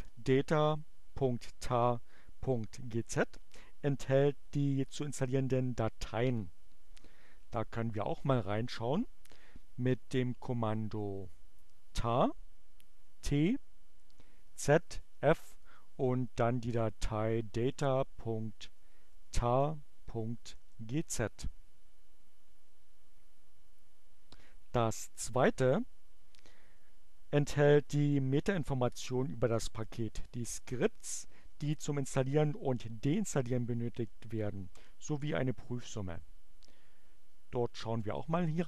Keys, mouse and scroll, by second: 8.6-9.7 typing, 12.0 t, 13.8 z, 15.0 space, 16.2-20.4 typing, 20.6 Return, 36.6-37.7 typing.